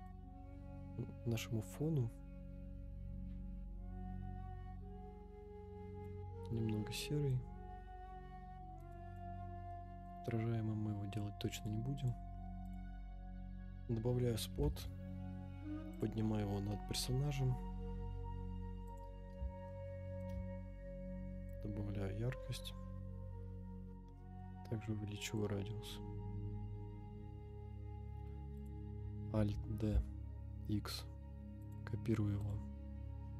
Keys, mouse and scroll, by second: 7.3-8.8 drag, 9.7-10.0 middle drag, 10.2 scroll down 2, 11.1 click, 12.0 click, 13.0 scroll up 2, 13.4-13.8 middle drag, 14.5 g, 14.6 z, 16.1 click, 16.9 KP_0, 18.8 click, 19.7-20.2 shift+middle drag, 20.5-21.5 scroll up 2, 21.5 click, 23.9 scroll down 2, 24.1 middle click, 25.4 click, 28.0 KP_0, 28.5 click, 29.3 alt+d, 29.9 x, 31.7 click, 32.4 click.